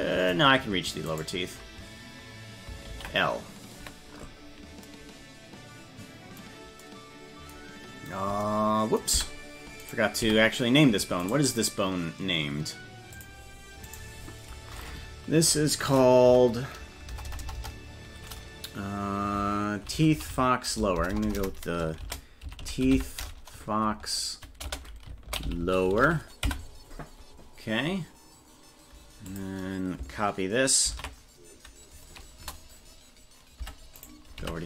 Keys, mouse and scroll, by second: 1.1 right click, 2.9 ctrl+l, 9.2 Tab, 9.9 right click, 10.2 Tab, 11.3 right click, 13.1 click, 13.9-27.0 drag, 17.3 BackSpace, 17.6 BackSpace, 20.1 Left, 20.9 BackSpace, 21.3 BackSpace, 21.5 BackSpace, 22.6 e, 29.3-32.7 drag, 33.6 Tab, 34.0 right click, 34.4 Tab.